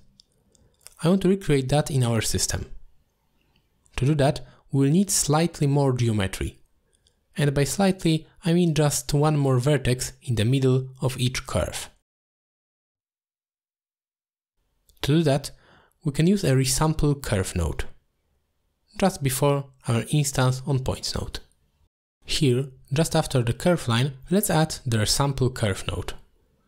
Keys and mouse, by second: 2.1 middle click, 3.0 alt+shift+click, 4.0 middle drag, 4.5 shift+middle drag, 5.2 shift+middle drag, 6.6 middle click, 8.3 middle click, 8.4 t, 8.7 click, 9.5 click, 10.3-13.7 drag, 14.9 click, 15.1 t, 16.6 middle click, 18.8 middle click, 19.4 middle click, 20.8 middle click, 21.4-24.6 drag, 25.0 middle click.